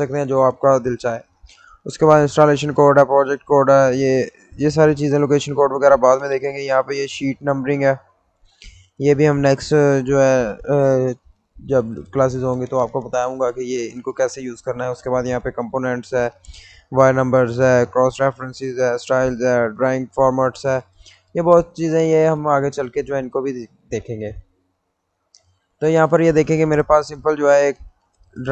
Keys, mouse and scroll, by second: 2.1 click, 6.5 click, 6.6 click, 9.1 click, 15.1 click, 22.2-25.4 drag, 26.5 middle click.